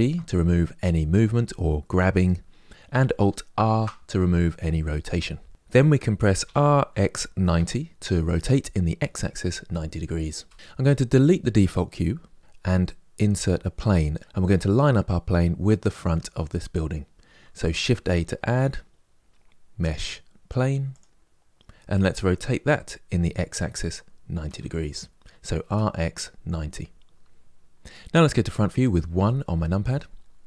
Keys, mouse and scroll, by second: 3.3 alt+r, 6.2 r, 10.5 click, 12.2 Delete, 17.8 shift+a, 22.0 r, 28.8 KP_1, 30.2-30.4 scroll up 6.